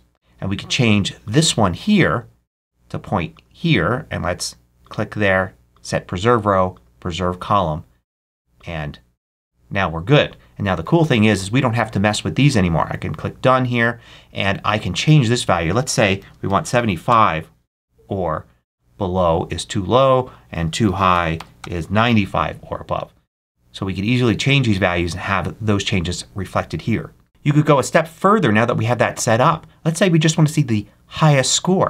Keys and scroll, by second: 16.1 super+a, 16.4 super+7, 16.6 5, 17.0 Return, 20.8 super+a, 21.0 super+9, 21.2 5, 21.5 Return.